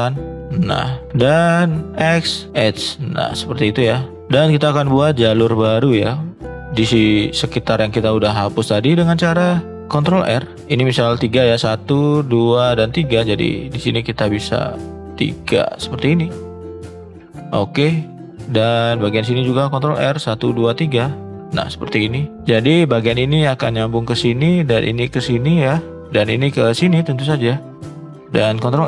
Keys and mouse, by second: 0.5 shift+middle click, 1.9 x, 4.1 shift+middle click, 10.3 ctrl+r, 17.3 click, 19.7 ctrl+r, 22.0 click, 23.0 click, 26.7 click, 28.5 ctrl+r.